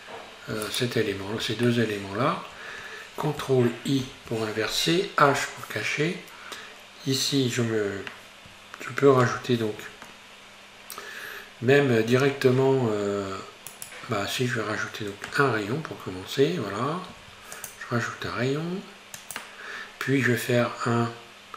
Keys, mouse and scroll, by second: 0.7 shift+right click, 1.7-4.1 shift+middle drag, 4.1 ctrl+i, 5.3 h, 9.2 ctrl+r, 17.1 ctrl+r.